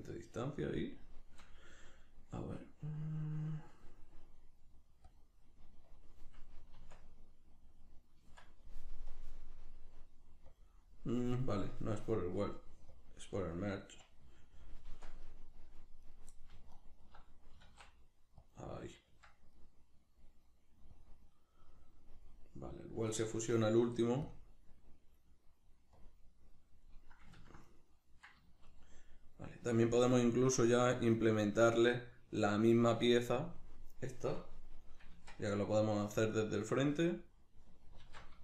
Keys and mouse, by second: 5.1-14.9 drag, 6.8 Tab, 14.9 Tab, 15.3 middle click, 16.0 right click, 16.7 alt+right click, 17.5 s, 18.5 click, 18.8-20.9 middle drag, 19.1 Tab, 20.9-22.7 drag, 22.7-24.3 middle drag, 24.3-26.9 drag, 26.9-36.7 middle drag, 35.1 Tab, 36.7-38.4 drag, 38.0 alt+q.